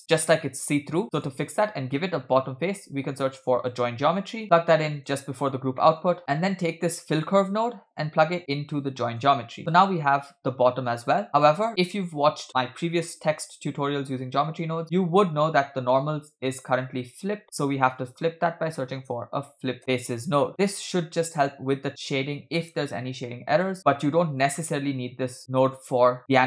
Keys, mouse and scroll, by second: 1.0 middle click, 1.0-1.3 scroll down 2, 1.6 click, 2.7 shift+a, 5.7 middle click, 6.2-6.8 drag, 7.9-9.2 drag, 14.8 scroll down 2, 15.6-16.1 scroll up 1, 17.4 shift+a, 21.0-23.7 drag, 24.4-25.8 drag.